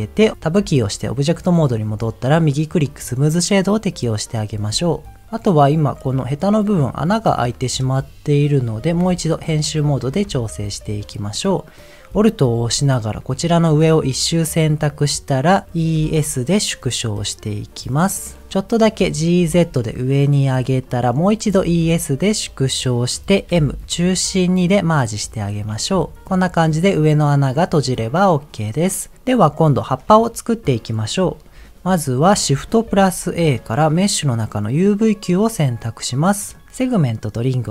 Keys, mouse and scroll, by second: 0.7 Tab, 2.3-3.4 right drag, 3.7 middle click, 5.5 middle click, 6.6 middle click, 7.4-8.5 middle drag, 8.9 Tab, 9.6 middle click, 10.4 shift+middle click, 10.8-11.3 scroll up 2, 11.4-12.0 scroll up 1, 13.0 alt+click, 15.8 e, 18.4 middle click, 19.4 g, 19.4 z, 20.4 click, 20.8 middle click, 21.5 e, 21.8 s, 22.8 click, 23.5 m, 24.5 1, 26.1 Tab, 26.2 middle click, 27.1 middle click, 28.1 scroll down 1, 28.5 click, 28.7-29.1 scroll down 2, 29.8 middle click, 31.6 scroll down 2, 32.8 shift+a, 35.5-36.2 scroll down 1, 36.2 middle click, 36.2 scroll down 1.